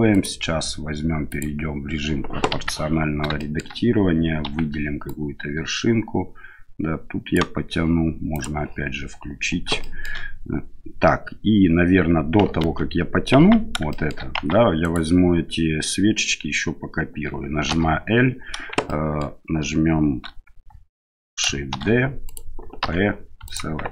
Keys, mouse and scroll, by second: 0.1 right click, 1.2 click, 2.5 KP_1, 3.3 shift+middle click, 4.4 1, 5.0-7.3 right drag, 8.3 click, 9.8 shift+middle click, 12.6 ctrl+z, 13.4 Tab, 13.9 shift+middle click, 14.4 Tab, 14.8 right click, 17.7 l, 18.9 shift+middle click, 21.8 shift+d, 22.8 p.